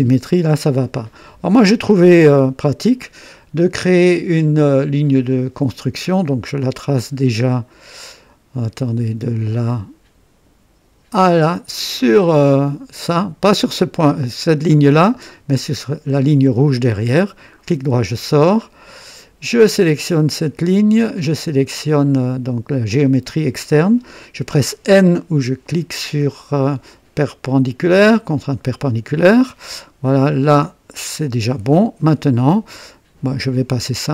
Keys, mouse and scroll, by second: 5.2 click, 9.5 click, 11.3 click, 17.3 right click, 19.5 click, 22.9 click, 27.9 n, 31.3-33.0 drag, 33.6 click.